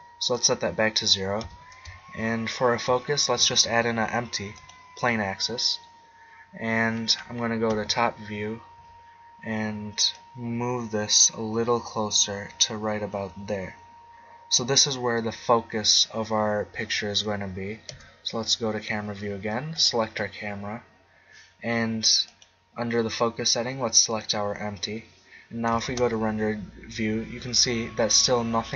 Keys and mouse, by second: 0.4-1.8 drag, 1.4 z, 2.7 shift+a, 7.7 KP_7, 10.1-12.0 drag, 15.2-17.0 middle drag, 17.9 KP_0, 19.7-21.6 drag, 22.2-24.1 drag, 25.9 shift+z.